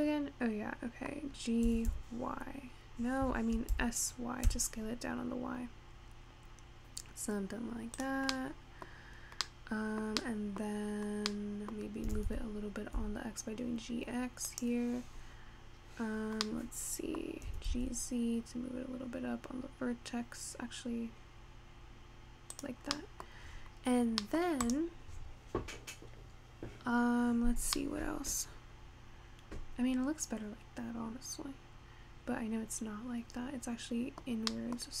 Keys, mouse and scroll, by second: 2.1 g, 3.8 s, 8.3 scroll down 1, 8.4 middle click, 9.0-9.7 scroll up 2, 9.7-10.9 middle drag, 10.9-11.6 scroll up 1, 11.6 middle click, 12.2 g, 15.8-16.5 scroll up 3, 16.5-17.4 middle drag, 17.4 scroll down 1, 17.6 g, 23.0 scroll down 1, 23.0-23.4 middle drag, 23.4 scroll up 1, 23.7-24.3 scroll down 3, 24.3 middle click, 24.7 click, 27.9-31.2 middle drag.